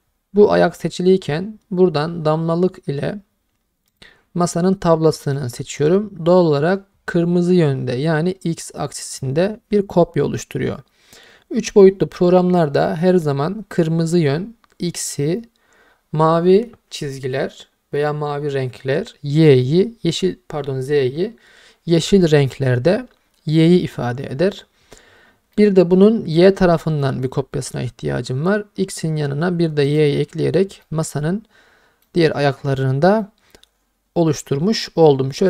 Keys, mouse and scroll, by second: 3.9 click, 25.6-25.9 middle drag, 27.0 middle click, 29.9 click, 30.8-32.0 middle drag, 32.8-33.2 scroll down 2, 33.2-35.4 middle drag.